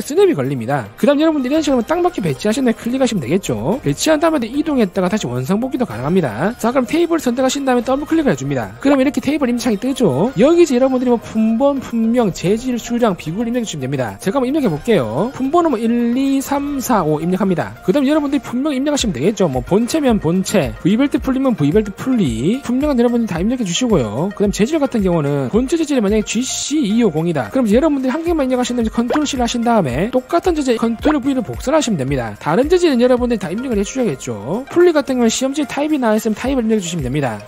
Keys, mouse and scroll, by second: 3.2 click, 4.5 click, 5.4 click, 8.2 click, 15.1 click, 15.7-23.1 typing, 26.6 shift+g, 27.0 shift+c, 30.3 ctrl+v, 31.8 ctrl+v, 32.4 shift+s, 33.3 shift+c, 33.9 4.